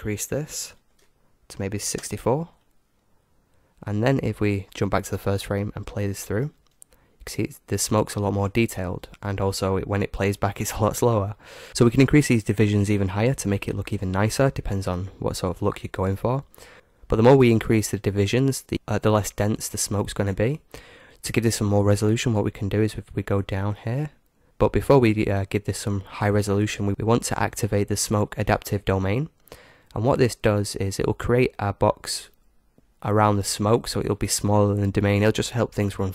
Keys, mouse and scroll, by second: 5.1-7.0 drag, 6.2 alt+a, 15.8 click, 23.0-24.5 middle drag, 30.2-31.9 drag, 34.0-36.1 middle drag.